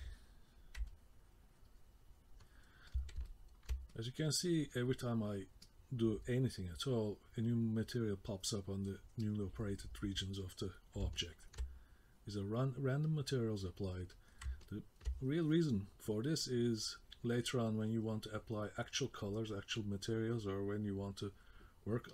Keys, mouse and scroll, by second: 0.9 middle click, 2.9 middle click, 3.3 ctrl+middle click, 3.9 middle click, 4.7 middle click, 5.6 middle click, 6.6 middle click, 7.5 middle click, 9.2 middle click, 10.4 middle click, 11.2 ctrl+middle click, 11.8 middle click, 13.0 middle click, 14.1 middle click, 14.6 ctrl+middle click, 16.4 middle click.